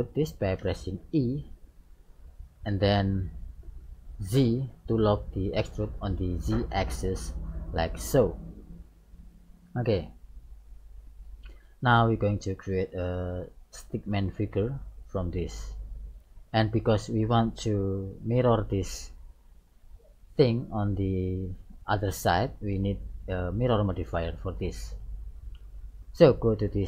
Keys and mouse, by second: 0.6 e, 9.3-11.2 middle drag, 16.4-18.5 middle drag, 24.2-26.2 middle drag.